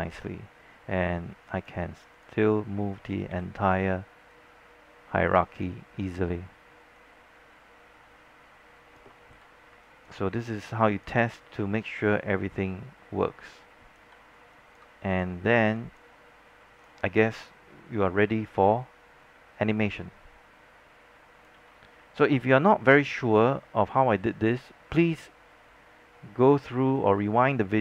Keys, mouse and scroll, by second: 0.3 z, 0.6-1.1 scroll down 1, 1.3 scroll up 1, 1.7 click, 3.4 w, 4.4 click, 5.9-6.4 scroll down 1, 6.4-7.1 scroll up 1, 7.1-9.4 drag, 9.4 z, 9.8-11.9 alt+drag, 11.9-14.1 drag, 14.1 z, 14.5 alt+click, 16.1 alt+click, 16.4-16.9 scroll up 1, 16.9-21.6 drag, 21.6 z, 22.3 alt+scroll down 1, 23.3 scroll up 1, 23.7 alt+middle click, 27.1-27.8 drag.